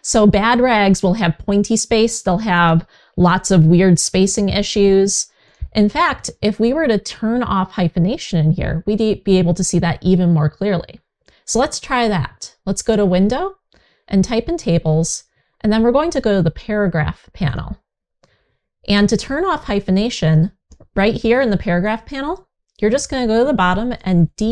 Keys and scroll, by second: 3.7 super+z.